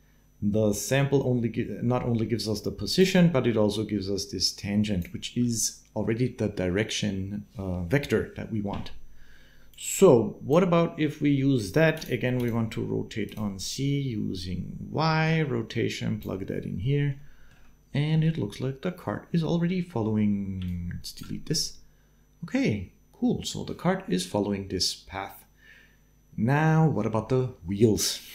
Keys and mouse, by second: 3.5-4.8 drag, 9.5 click, 11.7 click, 12.3 click, 15.3-16.4 drag, 17.0 shift+click, 17.9 space, 20.4 d, 20.4 click, 21.0 d, 28.0 space.